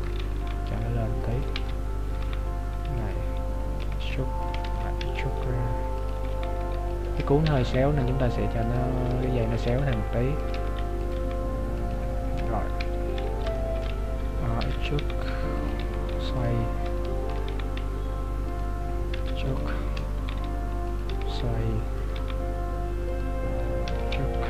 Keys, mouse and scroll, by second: 0.0 Tab, 0.5 g, 1.6 Tab, 2.2 g, 4.7 ctrl+z, 5.0 e, 6.4 g, 12.8 KP_7, 13.6 shift+middle click, 14.7 e, 15.0 g, 15.8 r, 17.0 shift+middle click, 17.5 g, 19.2 e, 20.3 g.